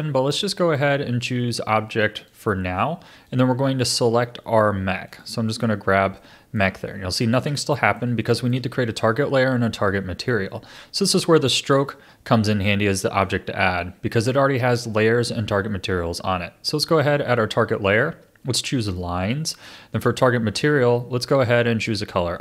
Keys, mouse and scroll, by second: 0.3-6.2 drag, 6.2-11.7 middle drag, 11.7 click, 12.9-15.9 middle drag, 17.0-20.0 drag, 20.1-22.4 drag.